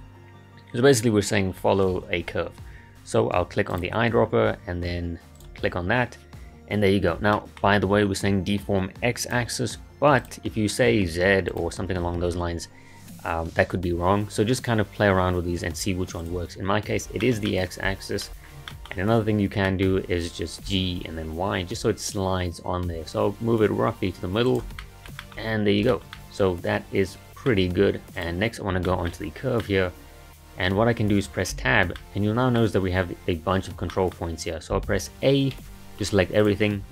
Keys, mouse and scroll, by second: 3.7 click, 7.3-9.2 shift+middle drag, 9.2-14.5 drag, 17.2-18.4 shift+middle drag, 18.4 scroll down 3, 18.7-19.2 shift+middle drag, 19.2-19.7 scroll up 2, 19.7-20.0 shift+middle drag, 20.0-20.7 scroll up 1, 20.7 g, 24.8-25.5 middle drag, 25.5-25.9 scroll up 1, 25.9-28.2 shift+middle drag, 28.2 click, 28.9-31.5 shift+middle drag, 31.5 Tab, 32.0-33.5 middle drag, 33.5-33.9 scroll down 1, 33.9-35.5 middle drag, 35.5 a, 36.4 click.